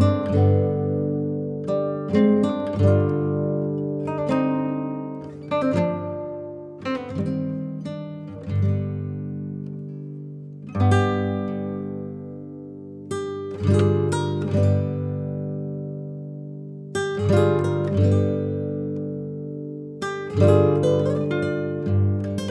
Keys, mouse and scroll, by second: 21.7-22.5 scroll up 1.